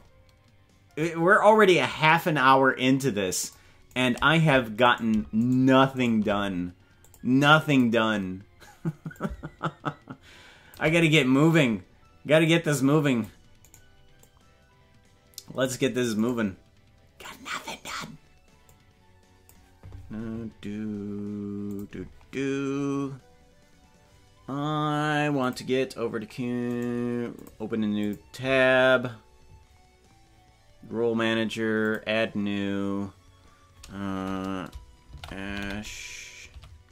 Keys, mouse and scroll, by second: 1.0-2.7 drag, 4.0 right click, 4.9 right click, 5.5 shift+right click, 6.1 right click, 7.0 click, 9.1-10.7 shift+drag, 11.5 right click, 12.4 click, 13.7 right click, 14.2-15.7 drag, 16.3 right click, 17.2 click, 18.6 click.